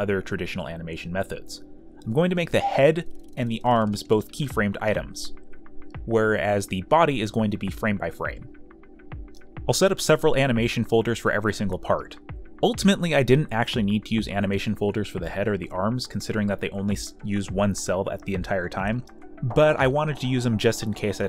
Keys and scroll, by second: 3.4 ctrl+z, 4.2 space, 4.3 z, 5.5 space, 6.6-9.8 typing, 10.0 ctrl+z, 11.3 e, 12.2 ctrl+z, 13.0 ctrl+z, 13.4 ], 15.4 e, 15.8 y, 16.6 space, 16.7 b, 19.1 z, 19.3 space, 19.4 z, 19.6 space, 20.2 ctrl+z.